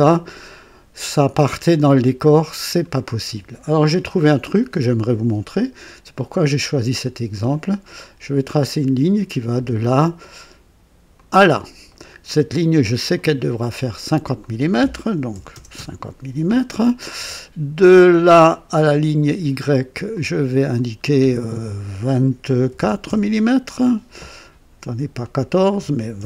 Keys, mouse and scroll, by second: 6.1 click, 8.6 click, 11.1 click, 11.8 right click, 13.1 click, 14.3 click, 15.3 KP_5, 15.5 KP_0, 15.7 KP_Enter, 18.4 click, 20.0 click, 22.5 KP_1, 22.7 KP_4, 23.0 Return, 25.1 click, 26.1 KP_2.